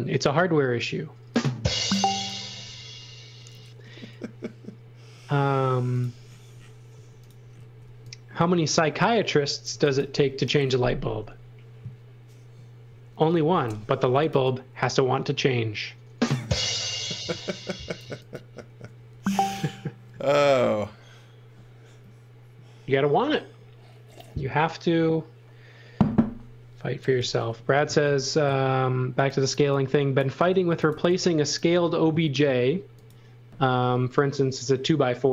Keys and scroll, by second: 0.0 Left, 6.9-8.3 typing, 9.6 x, 10.0 v, 14.0 x, 14.3 v, 18.0 x, 29.1-31.4 typing, 32.4 space.